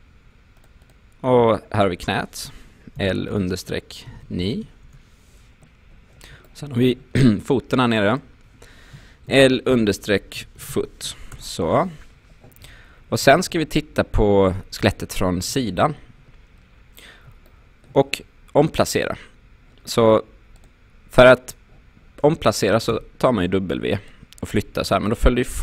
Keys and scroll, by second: 3.0-4.7 typing, 4.9 Return, 9.3-11.3 typing, 11.3 Return, 13.3 space, 15.5 space, 22.9 w.